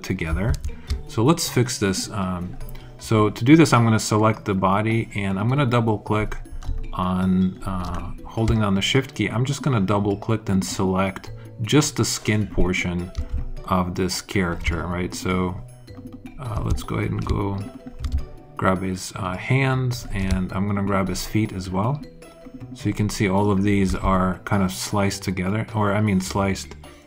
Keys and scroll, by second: 0.5 alt+super+z.